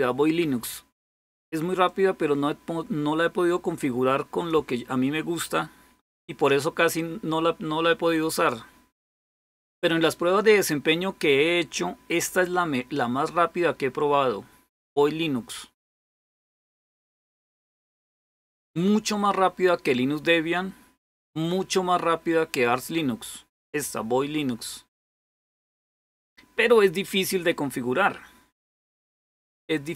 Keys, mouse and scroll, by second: 0.0 typing, 1.7-9.3 drag, 9.4 click, 12.7-15.5 drag, 23.4 click.